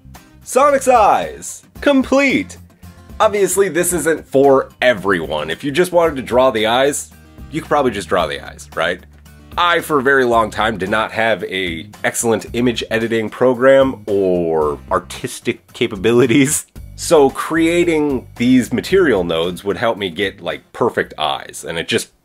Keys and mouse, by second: 4.5-11.1 drag, 11.1-12.4 middle drag, 12.4-14.3 drag, 14.3-22.2 middle drag.